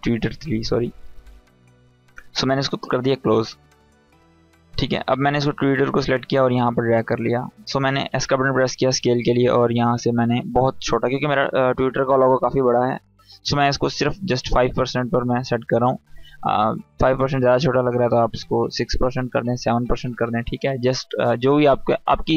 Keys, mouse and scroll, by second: 7.7 s, 8.7-9.6 drag, 17.6 click, 21.3 click.